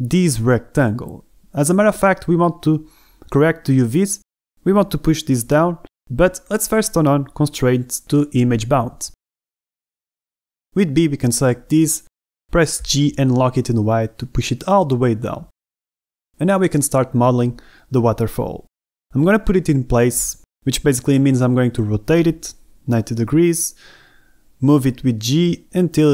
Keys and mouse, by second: 2.3 Tab, 2.9 Tab, 6.6 a, 12.1 b, 13.7 g, 14.6 y, 16.7 shift+middle click, 17.0 a, 19.3 Tab, 20.6 r, 20.8 y, 21.5 KP_Subtract, 21.6 KP_9, 21.7 KP_0, 22.0 KP_Enter, 23.3 click, 24.0 g, 24.1 z, 24.6 click, 25.3 g, 25.4 x, 26.0 s.